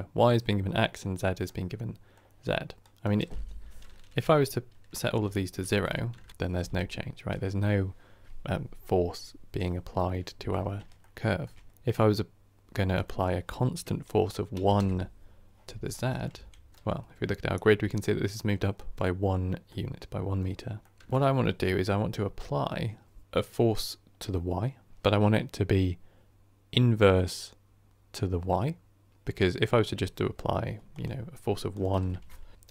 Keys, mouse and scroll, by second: 5.1 click, 5.7 Tab, 10.5 scroll up 3, 10.9-14.7 shift+middle drag, 14.7-15.8 drag, 15.8-16.2 middle drag, 16.2 KP_1, 16.7-18.7 shift+middle drag, 18.7-19.6 scroll down 1, 19.6-20.4 middle drag, 20.4-20.7 scroll down 1, 20.7 middle drag, 21.0-32.7 drag.